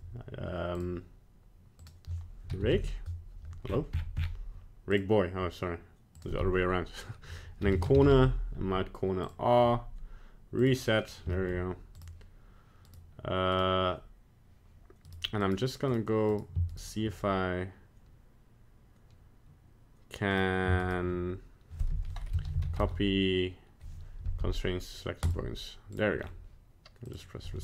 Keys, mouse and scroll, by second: 1.8 click, 6.1 click, 10.6 click, 11.0 scroll down 1, 11.3 shift+middle click, 12.0 right click, 12.9 right click, 13.5 right click, 15.1 right click, 15.4 right click, 15.9 right click, 16.3 right click, 16.7-17.0 shift+right click, 20.3 right click, 20.8 shift+right click, 21.9 F3, 25.9 right click, 26.2-27.0 scroll down 1, 27.0 click, 27.0 scroll down 1.